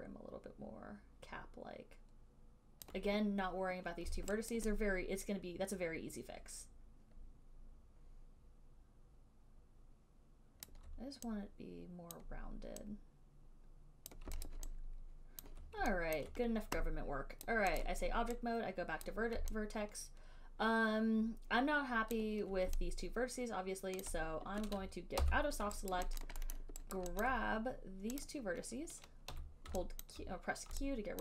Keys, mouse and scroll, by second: 3.1 click, 4.8 alt+right click, 10.8 alt+right click, 12.3 click, 14.3 click, 14.6 alt+click, 15.6 alt+click, 16.4 click, 17.7 right click, 18.0 right click, 19.3 click, 22.4 alt+click, 24.3 alt+click, 25.4 b, 26.2 alt+right click, 26.5 alt+right click, 26.7 alt+middle click, 26.8 alt+middle click, 27.2 alt+right click, 27.5 alt+click, 28.5 click, 29.6 q.